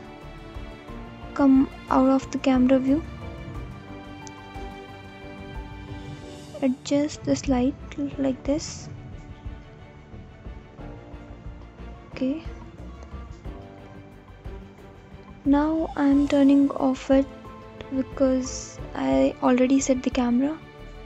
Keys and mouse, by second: 0.6 middle click, 3.6-4.1 middle drag, 6.0 middle click, 16.8 click, 17.5 click.